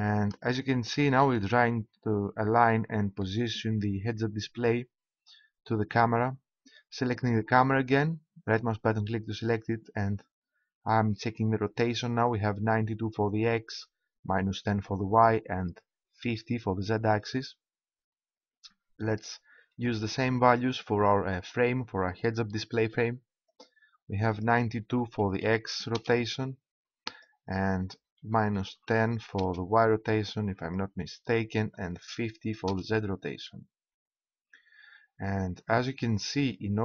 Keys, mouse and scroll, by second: 2.3-7.7 middle drag, 9.4 right click, 19.1-20.9 right drag, 23.4-26.0 drag, 27.0-28.8 drag, 30.5-32.3 drag, 33.4-35.2 middle drag.